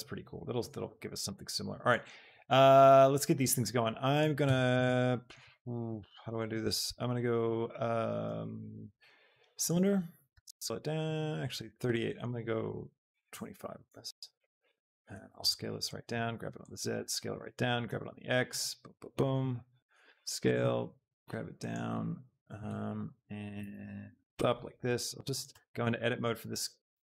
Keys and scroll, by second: 4.3 Tab, 10.2 s, 13.1 KP_5, 13.5 Return, 15.0 s, 16.1 z, 17.9 x, 20.1 shift+s, 20.9 g, 21.2 z, 24.9 Tab, 26.7 Tab.